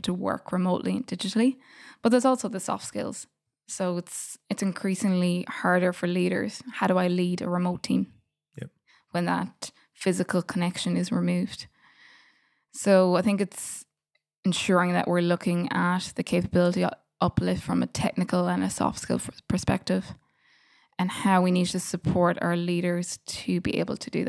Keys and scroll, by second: 12.5 super+].